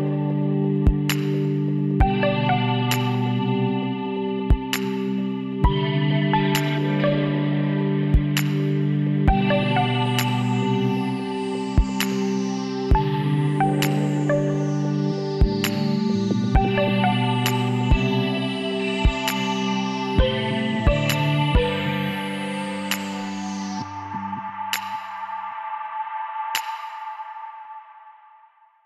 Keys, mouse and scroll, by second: 1.5 middle click, 2.2 click, 2.2 b, 3.4-5.1 drag, 8.6-9.9 middle drag, 9.9 Tab, 10.4 a, 10.6 middle click, 14.3 KP_1, 14.7-18.2 drag, 20.6-23.9 middle drag, 23.9-25.8 drag, 26.4-28.8 middle drag.